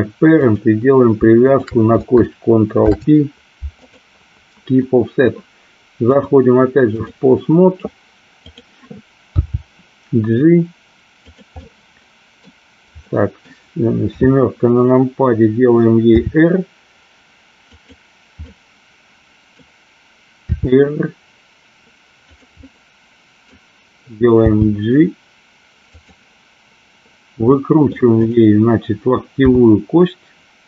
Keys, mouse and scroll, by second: 0.4 click, 1.4 shift+click, 2.8 ctrl+p, 6.2 click, 8.4 click, 9.4 g, 11.6-12.4 middle drag, 13.0-13.5 middle drag, 14.2 KP_7, 16.2 r, 17.8 click, 18.5 middle click, 20.5 r, 22.4 click, 22.7 middle click, 24.5 g, 27.7 middle click, 28.2 click, 29.5 KP_7.